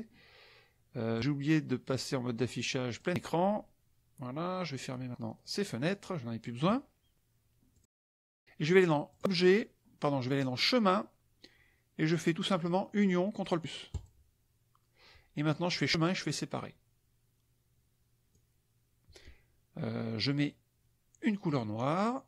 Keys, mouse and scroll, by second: 1.1 click, 2.9 click, 4.7 middle click, 5.9 middle click, 7.7 click, 9.0 click, 14.0 click, 15.6 click, 18.3 click.